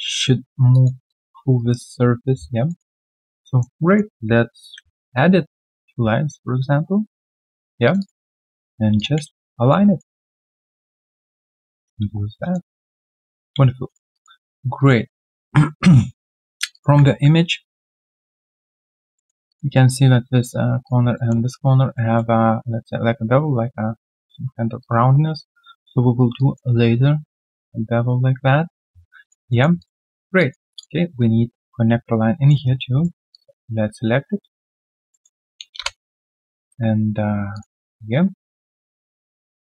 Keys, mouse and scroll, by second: 0.7 alt+click, 1.5 right click, 2.3-2.6 scroll down 1, 2.6 alt+middle click, 3.8 alt+right click, 4.6 ctrl+alt+q, 5.1 middle click, 6.9 right click, 7.9 double click, 8.1 typing, 9.7 middle click, 9.7-12.5 typing, 10.7 double click, 12.4 alt+right click, 12.7 alt+middle click, 13.0 alt+right click, 13.2 alt+click, 13.6 q, 14.1 alt+click, 14.4 alt+middle click, 14.6 alt+scroll up 1, 14.7 alt+click, 15.0 alt+middle click, 15.2-15.7 alt+scroll down 1, 16.3 alt+middle click, 16.7 alt+click, 17.0 ctrl+a, 19.4 alt+click, 19.7 alt+middle click, 21.1 alt+middle click, 22.0 alt+middle click, 25.4 alt+middle click, 26.3 alt+middle click, 28.9 alt+middle click, 29.2 alt+click, 29.5 alt+middle click, 29.7 alt+click, 30.1 alt+right click, 30.3 alt+click, 32.2 alt+click, 32.3 alt+middle click, 32.6 right click, 34.0 right click, 35.1 middle click, 35.6 middle click, 35.8 Return, 38.0-39.0 typing, 38.5 middle click, 39.4 right click.